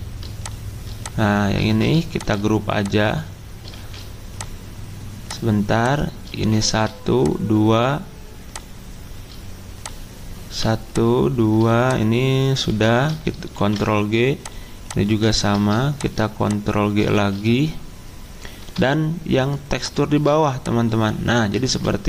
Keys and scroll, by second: 1.7 ctrl+z, 3.7 ctrl+z, 6.3 ctrl+z, 12.7 ctrl+z, 13.6 ctrl+g, 15.4 ctrl+z, 17.1 ctrl+z, 21.6 ctrl+z.